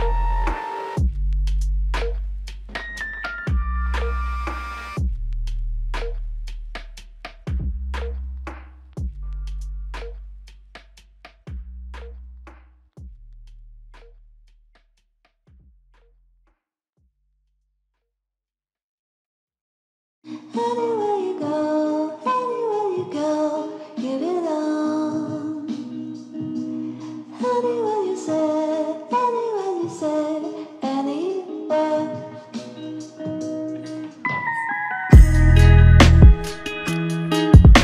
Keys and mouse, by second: 0.3 ctrl+click, 1.2 ctrl+click, 8.1 shift+click, 11.3 alt+shift+click, 12.4 double click, 16.2 ctrl+click, 17.8 shift+click, 18.5 double click, 21.3 shift+click, 23.0 shift+click, 25.1 shift+click, 28.1 double click, 28.5 shift+click, 30.9 shift+click, 31.1 ctrl+alt+click, 31.9 ctrl+alt+click, 32.0 alt+click, 33.7 ctrl+alt+click, 34.7 ctrl+alt+click, 36.4 ctrl+alt+click.